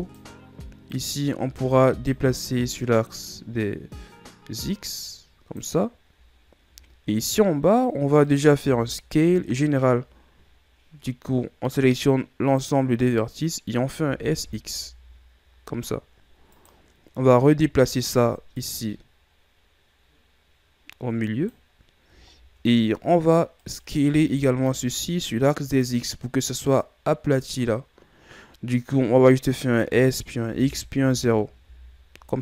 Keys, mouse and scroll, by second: 0.9 right click, 1.5 b, 2.8-5.8 drag, 6.4-8.3 scroll down 5, 8.3 right click, 8.7 b, 14.0 s, 17.2-17.6 scroll down 1, 17.6 scroll up 2, 18.5-21.6 drag, 21.8-22.2 scroll down 2, 22.2 scroll up 2, 23.6 right click, 24.1 b, 29.9 s.